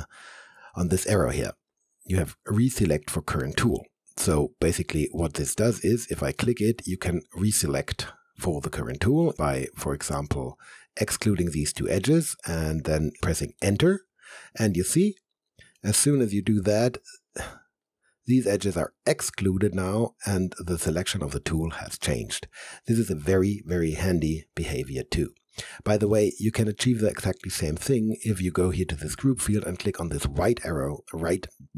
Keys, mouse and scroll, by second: 9.4 ctrl+Num_Lock, 10.0 ctrl+click, 13.2 Return, 15.2 alt+click, 15.8 alt+middle click, 16.6 alt+right click, 17.5 alt+middle click.